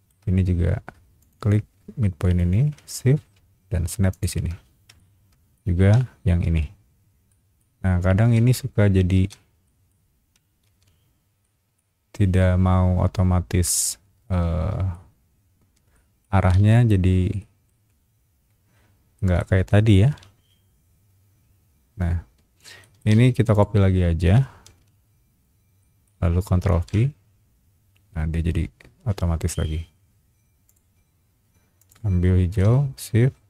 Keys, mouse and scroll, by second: 1.2 shift+click, 4.1 shift+click, 5.0 shift+middle click, 6.4 ctrl+v, 7.3 middle click, 8.3 Escape, 8.6 scroll down 1, 9.1 space, 9.6 middle click, 10.6 ctrl+v, 11.4 middle click, 13.7-14.9 middle drag, 15.9 middle click, 16.5 space, 17.4 middle click, 19.1 middle click, 20.0 ctrl+v, 22.8 middle click, 23.1 space, 23.5 click, 24.7 ctrl+c, 25.8 middle click, 26.7 ctrl+v, 30.6 click, 31.8 click.